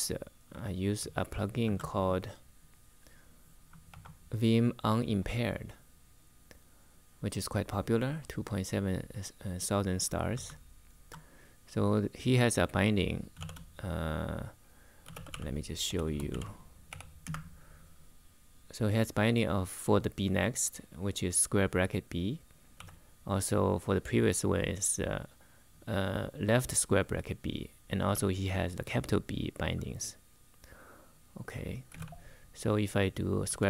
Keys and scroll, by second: 0.6 super+Tab, 1.4 super+Tab, 3.6 super+3, 10.1 super+Tab, 13.1 shift+;, 14.5-17.5 typing, 22.5 k, 27.6 typing, 31.4-32.2 typing, 33.2-33.6 typing.